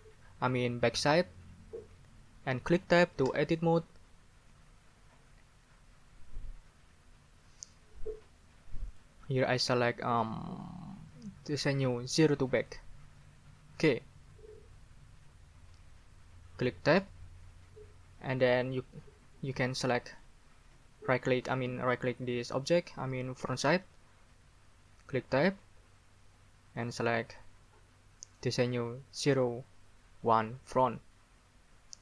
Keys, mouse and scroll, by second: 3.2 Tab, 8.9 scroll up 1, 12.6 click, 16.9 Tab, 20.1 right click, 25.2 Tab, 26.7 scroll up 1, 30.7 scroll up 1.